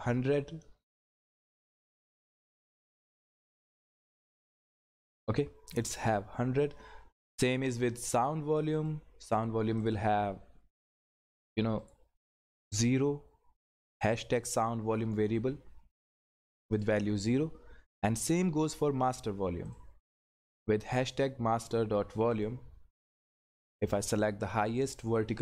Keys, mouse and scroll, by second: 1.0 click, 5.9 click, 8.7 click, 16.7 click, 19.7 click, 22.3 click.